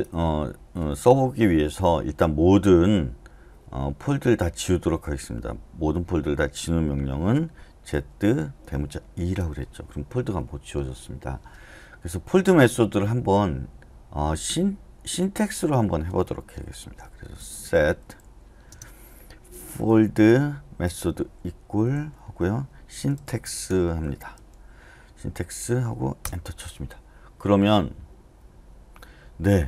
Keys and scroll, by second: 7.9 z, 9.1 shift+e, 17.5-24.8 typing, 26.2 Return.